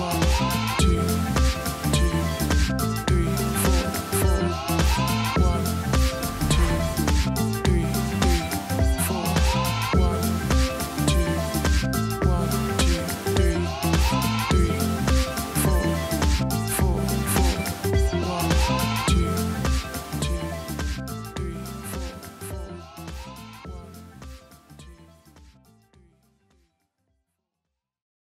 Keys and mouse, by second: 0.0 right click, 0.8 click, 3.7 click, 4.7 click, 7.2 click, 8.2 click, 10.4 click, 11.9 click, 16.9 click, 19.5 click, 20.3 click, 23.1 ctrl+s.